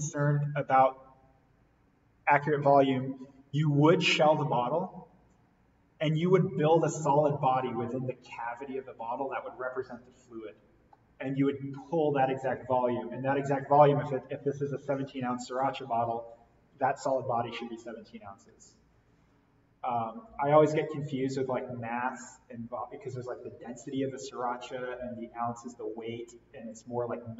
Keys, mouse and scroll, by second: 2.9 click.